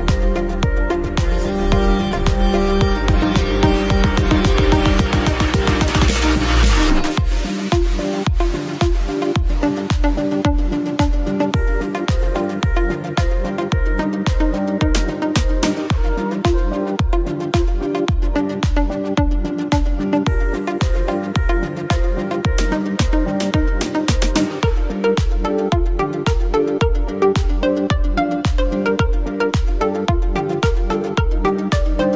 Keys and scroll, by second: 5.4 ctrl+t, 7.3 ctrl+z, 25.6 shift+space.